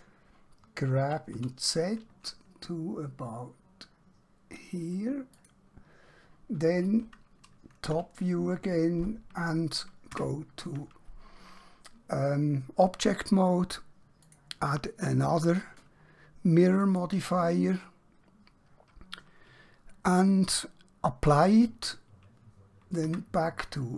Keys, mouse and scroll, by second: 1.1 g, 3.7 typing, 5.4 click, 8.0 KP_7, 10.2 Tab, 14.3 click, 21.3 click, 23.1 Tab.